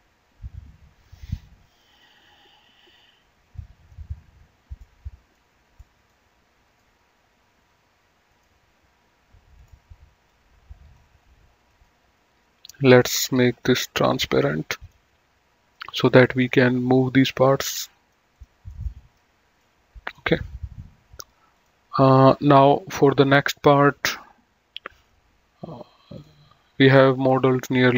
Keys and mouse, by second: 1.2 click, 3.8 click, 5.1 middle click, 6.9 right click, 8.5 right click, 9.8 click, 11.9 right click, 13.8 click, 15.9 middle click, 17.7 click, 18.9 middle click, 21.8 click.